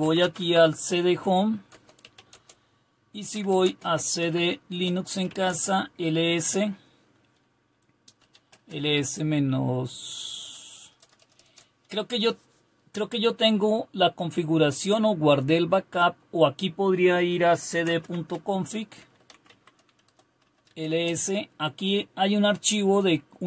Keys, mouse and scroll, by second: 0.0 typing, 1.7-5.8 typing, 8.0-8.7 typing, 18.9-20.9 typing, 20.0 Return.